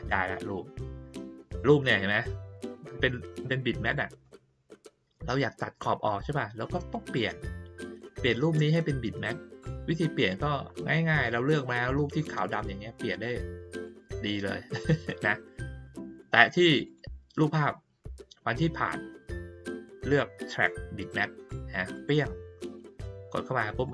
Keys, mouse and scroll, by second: 0.4-2.6 drag, 4.2 click, 6.9-10.3 drag, 13.8 click, 16.3 click, 16.8 click, 18.7 click, 21.9 click, 23.8 click.